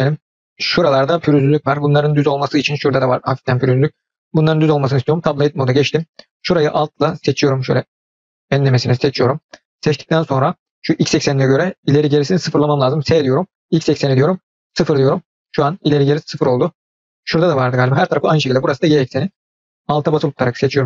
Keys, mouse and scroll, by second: 1.5-2.4 middle drag, 2.8-4.5 middle drag, 7.0 alt+click, 7.6 alt+click, 13.0 s, 16.0-17.8 middle drag, 19.2 click, 20.2-20.8 alt+drag.